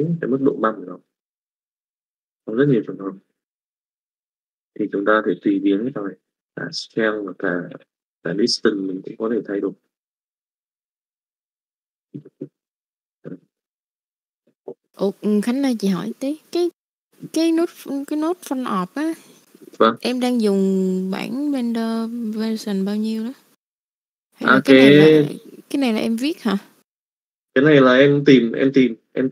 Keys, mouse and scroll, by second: 0.8 middle click, 1.8 middle click, 2.7 middle click, 3.7 middle click, 5.8 middle click, 6.7 KP_5, 7.1 middle click, 7.7 KP_5, 8.1 middle click, 9.0-11.8 drag, 11.9 click, 13.0 middle click, 13.5 middle click, 13.9 click, 21.2 click, 24.0 middle click, 25.1 click, 26.9 middle click, 28.1 click, 29.1 click.